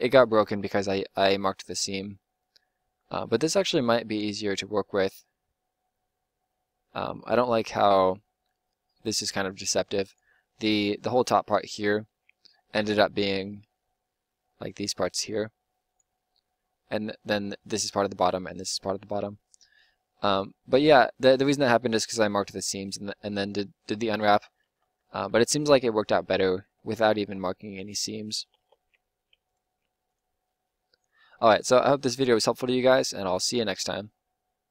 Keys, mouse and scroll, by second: 3.0-8.9 middle drag, 8.9 g, 14.6 g, 24.4-24.9 ctrl+z, 25.4 ctrl+z, 25.6 ctrl+z, 28.4 a, 28.6 a, 28.8 u.